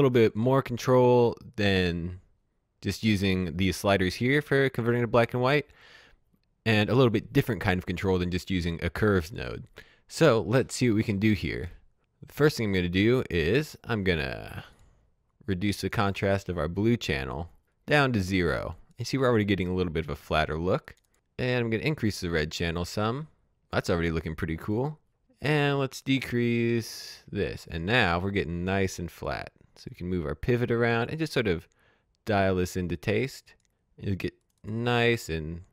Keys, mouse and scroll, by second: 12.6 click, 20.1 click, 20.6-29.9 drag, 27.2 click.